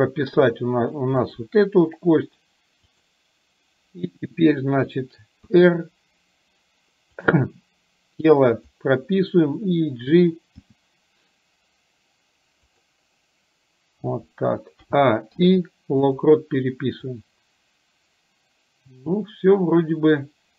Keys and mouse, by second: 3.0 click, 5.5 r, 8.7 click, 10.8 g, 14.8 a, 15.3 i, 17.2-20.5 drag.